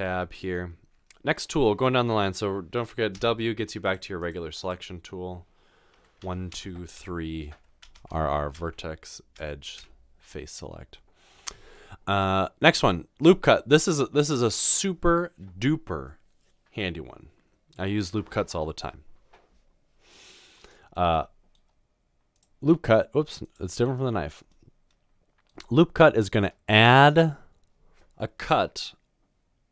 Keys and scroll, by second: 6.5-9.8 typing.